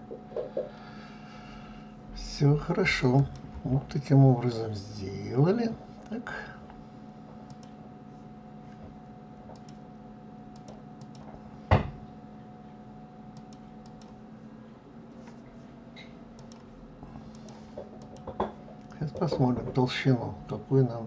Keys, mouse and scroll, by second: 2.7 click, 4.5 scroll down 1, 7.1 click, 9.1 click, 10.1 click, 10.6 click, 13.4 click, 16.0-17.7 drag, 18.8-21.0 middle drag.